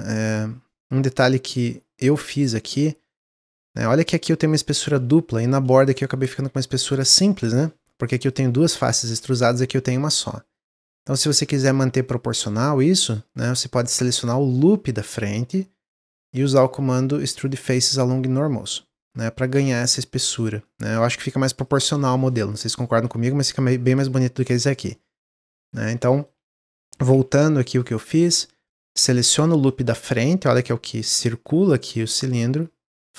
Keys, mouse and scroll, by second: 0.7 alt+click, 1.5-2.8 middle drag, 2.8 scroll up 2, 3.0 middle click, 3.6-4.1 scroll up 3, 4.1 click, 4.5 shift+click, 5.7 click, 6.3-6.8 scroll down 2, 8.2 click, 8.5 shift+click, 9.4 click, 9.8 scroll down 2, 10.1-11.2 middle drag, 11.2 alt+click, 11.5 middle click, 12.4-13.5 scroll up 1, 13.5 middle click, 14.3 scroll down 2, 14.5-16.3 middle drag, 16.3-18.7 drag, 18.9-21.1 middle drag, 21.1 Tab, 21.5 click, 21.8 scroll down 1, 22.1 middle click, 22.3-23.0 scroll up 1, 23.0 middle click, 23.9 click, 24.9-25.7 middle drag, 25.7 click, 26.0 middle click, 26.4 ctrl+z, 26.6 ctrl+z, 26.9 ctrl+z, 27.1 ctrl+z, 27.4 scroll up 1, 27.6 click, 28.0-29.1 middle drag, 29.1 alt+click, 29.6-32.7 middle drag, 33.0-33.1 drag.